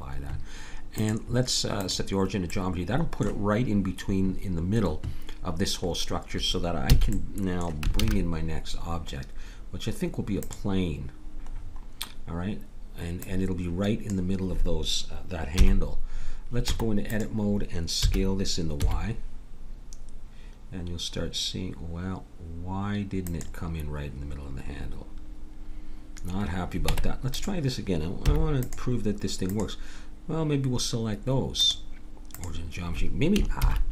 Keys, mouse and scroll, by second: 2.6 middle click, 6.9 a, 7.9 shift+a, 13.2-14.9 drag, 15.6 KP_7, 16.6 Tab, 18.0 s, 24.8 middle click, 26.8 Tab, 28.2 x, 29.5-31.5 drag.